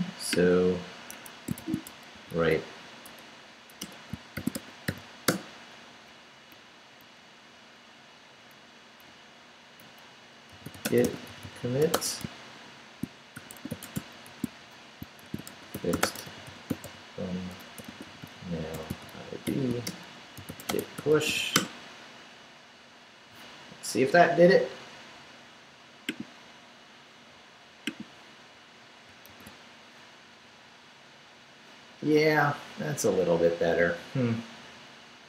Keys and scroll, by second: 1.1 Escape, 1.6-3.1 typing, 3.8 Return, 4.1-5.4 typing, 6.1 Up, 8.2 Down, 10.3-21.8 typing, 29.3 super+r.